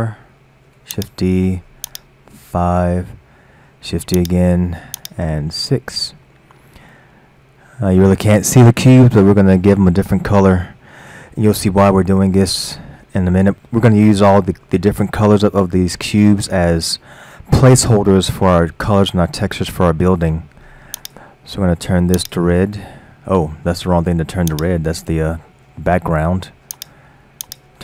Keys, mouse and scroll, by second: 0.8 shift+d, 1.9-4.0 drag, 4.0 shift+d, 5.0-6.3 drag, 6.3-7.5 middle drag, 7.5-8.4 scroll up 4, 8.4-13.8 shift+middle drag, 14.5-17.5 scroll down 3, 21.0 click, 24.6 click.